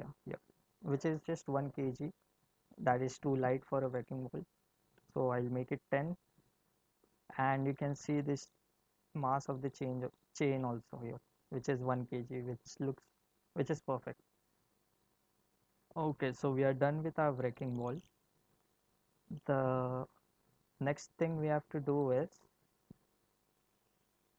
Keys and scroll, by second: 4.9 0, 6.4 Return, 18.4 space, 22.4 space.